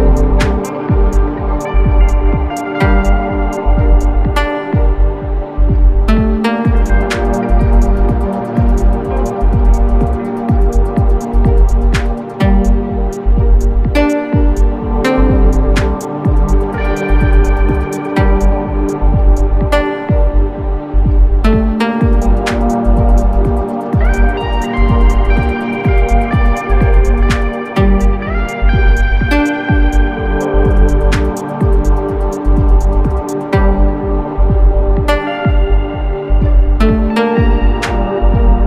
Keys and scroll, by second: 1.0 i, 2.6 v, 4.4 i, 5.4 v, 13.6 super+c, 22.8 super+g, 26.6 super+c, 27.0 super+f, 27.7 shift+Right, 28.2 shift+Right, 28.9 shift+Right, 29.6 shift+Right, 30.1 shift+Right, 32.6 super+g.